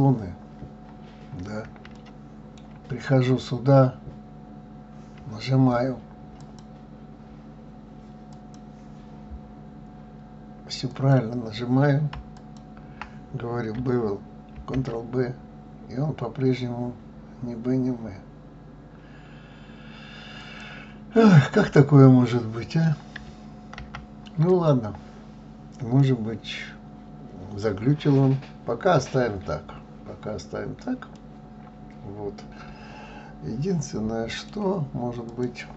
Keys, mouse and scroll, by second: 0.8-1.9 scroll up 1, 1.9-2.9 shift+middle drag, 2.9-3.3 scroll up 2, 6.4-9.4 drag, 10.9 click, 12.3 alt+click, 14.6 ctrl+b, 21.2-23.8 middle drag, 23.8 ctrl+z, 24.5 click, 26.0-29.0 middle drag, 31.2-34.2 middle drag, 35.3 click.